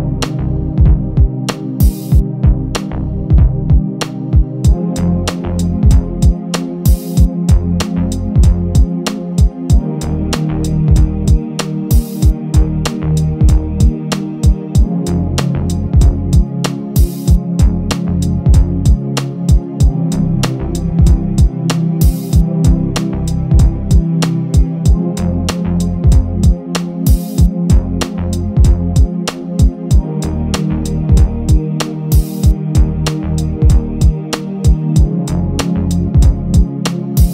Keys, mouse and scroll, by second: 0.4 click, 1.9 click, 2.3 KP_1, 2.8 click, 3.1-3.5 scroll up 2, 5.4 s, 9.9 click, 10.6 KP_3, 11.2-11.6 scroll up 5, 11.6-13.8 drag, 15.0 KP_1, 15.7-16.3 scroll down 3, 16.5 g, 18.2-18.8 scroll down 3, 18.8-19.7 scroll up 1, 19.7 a, 22.1 click, 23.0 KP_3, 23.5 g, 24.2-24.9 scroll up 4, 25.1 click, 25.5-26.4 scroll up 5, 26.4 KP_7, 26.7-27.0 scroll down 5, 27.3 click, 27.6-28.2 scroll up 6, 28.2 click, 28.7 Tab, 29.5 click, 30.9 click, 31.2 KP_7, 31.6 g, 32.8 click, 33.4 click, 34.0 KP_7, 34.7 g, 35.7 e, 36.5 click, 36.9-37.3 scroll up 6.